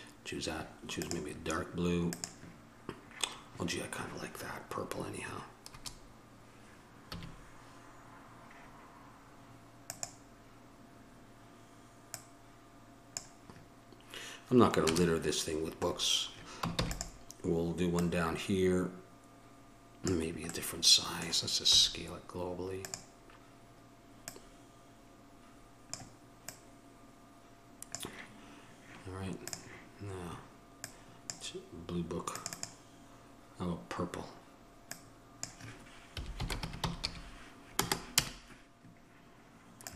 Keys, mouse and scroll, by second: 5.9 KP_0, 7.4 a, 10.0-13.2 drag, 15.0 KP_0, 16.9 shift+d, 20.8-21.9 middle drag, 21.9 s, 29.6-34.5 right drag, 34.5-39.8 middle drag.